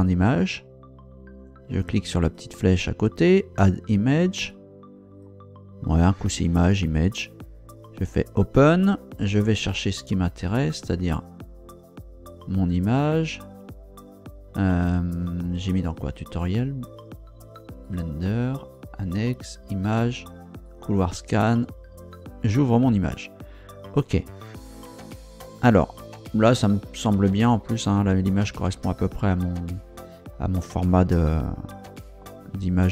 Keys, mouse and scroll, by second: 0.2 click, 1.8 click, 3.2 click, 4.5 click, 8.1 click, 10.3 click, 12.3 click, 15.8 click, 17.8 click, 18.7 click, 19.4 click, 20.6 click, 22.2 click, 31.4-32.9 drag.